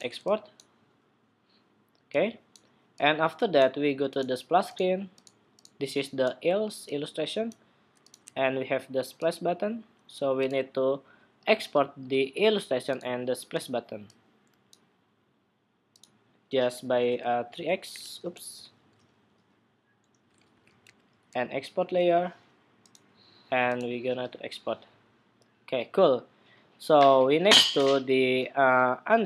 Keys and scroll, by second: 18.2 super+z.